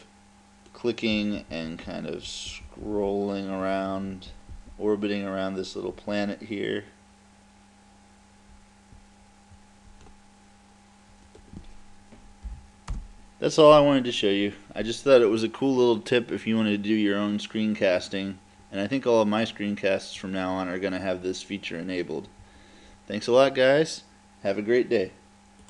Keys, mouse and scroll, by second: 0.7-2.5 middle drag, 11.3-13.0 right drag, 12.5 Delete, 13.0 click.